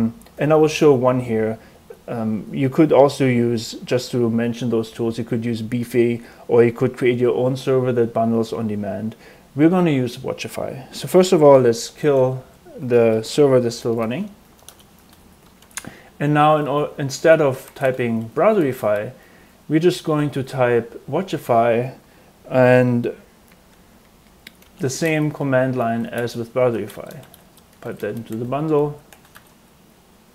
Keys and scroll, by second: 11.1-15.1 typing, 15.5 Return, 15.7 ctrl+l, 16.6-19.0 typing, 24.3-30.0 typing.